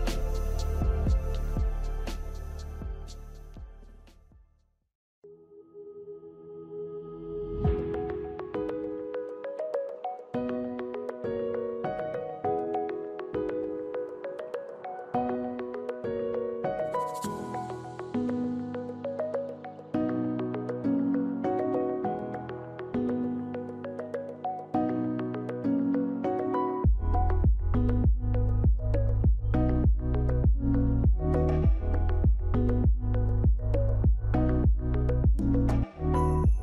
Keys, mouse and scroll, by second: 29.1 click.